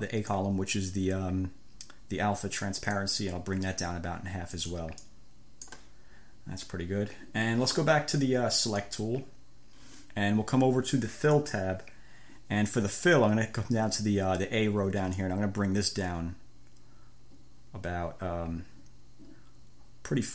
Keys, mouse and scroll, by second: 0.6-3.4 drag, 4.8 click, 5.3 click, 8.8 click, 11.6-13.2 drag, 15.4-20.3 drag.